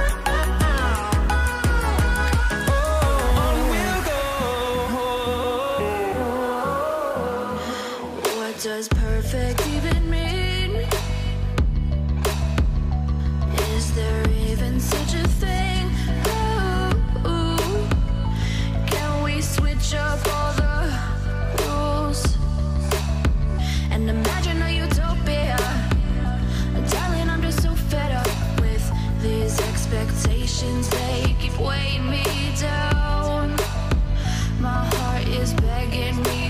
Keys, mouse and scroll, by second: 1.4 ctrl+t, 3.8 alt+click, 7.7 Return, 9.1 double click, 12.2 double click, 13.0 typing, 13.2 Return, 15.1-16.2 typing, 23.0 typing, 27.1 double click, 27.8 typing, 28.5 Return, 30.9 double click.